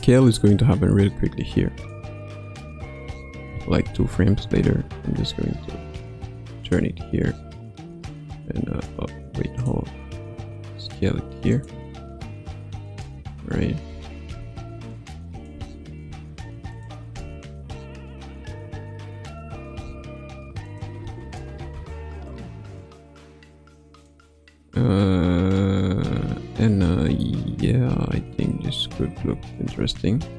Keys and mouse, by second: 0.2-1.9 drag, 3.9 Left, 5.4 r, 7.8 a, 9.5 click, 10.3 s, 12.9 a, 13.8 i, 14.8 click, 15.5 space, 16.7 click, 16.7 space, 17.0 space, 19.8 space, 20.6 click, 21.0 space, 21.6 space, 22.2 click, 27.2-29.0 middle drag, 29.8 KP_1.